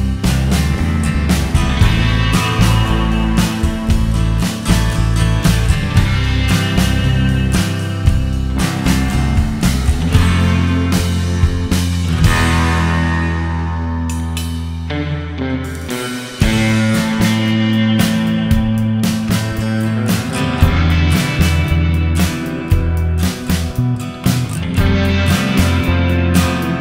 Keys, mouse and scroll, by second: 0.7 middle click, 1.2-2.1 scroll down 10, 2.0 middle click, 2.3-2.8 scroll up 9, 2.8 middle click, 3.6 click, 5.6 scroll down 1, 5.8 middle click, 6.7 click, 7.5 scroll down 3, 14.0 space, 14.3-15.5 scroll up 9, 15.5 middle click, 16.6-16.9 scroll down 7, 17.0 middle click, 18.6 right click, 19.5 right click, 20.6 click, 21.0 click, 21.2 click, 21.6 click, 22.0 scroll down 2, 22.1 middle click, 22.6 right click, 23.4-23.8 click, 23.5 click, 23.6 click, 24.0-24.3 scroll down 2, 24.3-24.7 scroll up 2, 24.7 middle click, 25.2 scroll down 1, 25.7 click.